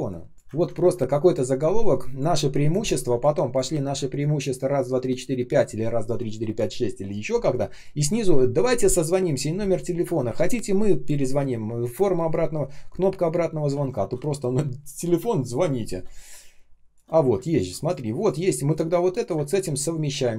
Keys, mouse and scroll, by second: 0.3 Delete, 0.5 ctrl+scroll down 1, 0.7 typing, 13.6 ctrl+z, 16.0 space, 16.5 space, 17.5 space, 19.2 space, 20.2 r.